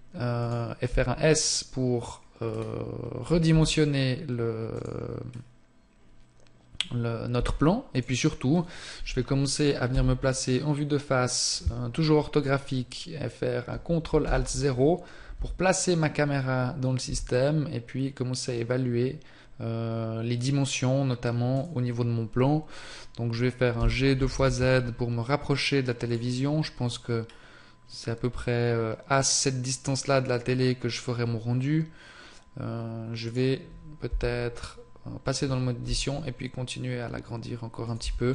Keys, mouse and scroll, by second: 2.4 scroll down 1, 3.6 s, 4.9 click, 5.4-6.8 scroll down 1, 7.4 s, 14.3 ctrl+alt+KP_0, 15.8 right click, 17.2 g, 26.2 click, 26.4-26.9 scroll up 1, 27.3 scroll down 1, 33.3 right click, 34.2 Tab, 35.9 s, 38.1 Tab.